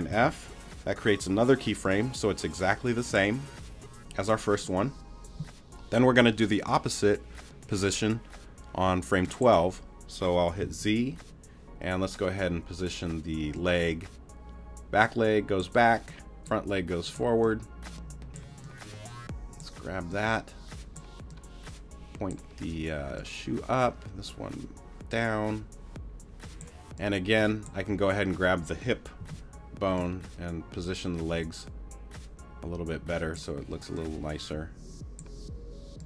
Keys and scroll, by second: 0.1 super+f, 10.6 z, 29.2 t.